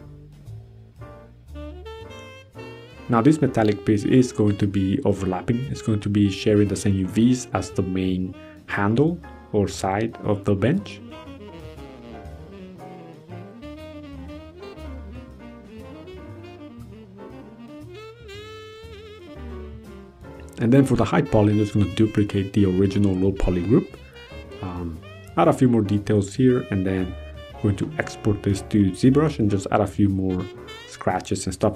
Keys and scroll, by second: 5.8 ctrl+g, 8.0 ctrl+a, 15.2 ctrl+d, 15.3 ctrl+h, 16.5 ctrl+a, 23.6 ctrl+d, 24.4 ctrl+d, 25.4 ctrl+d, 27.4 ctrl+d, 29.4 ctrl+c, 30.3 ctrl+v, 31.2 ctrl+c.